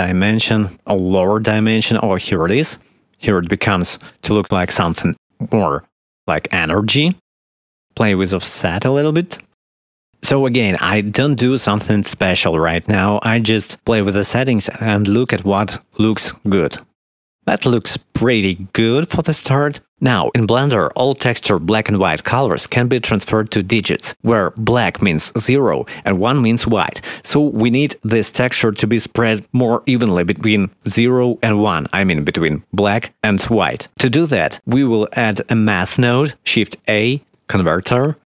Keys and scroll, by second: 37.0 shift+a.